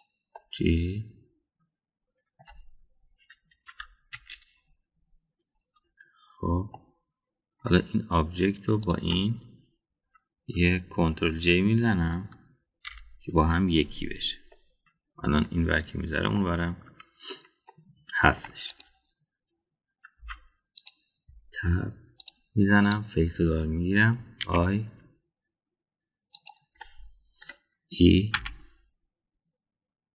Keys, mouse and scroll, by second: 1.3-3.4 middle drag, 4.7 KP_1, 5.0 KP_3, 7.7-8.6 middle drag, 9.8 shift+click, 13.8 ctrl+j, 15.5-16.4 middle drag, 17.3-18.3 middle drag, 18.7-19.3 middle drag, 19.6 click, 21.1 Tab, 23.2 click, 25.3 i, 27.7-28.5 middle drag, 29.3 e.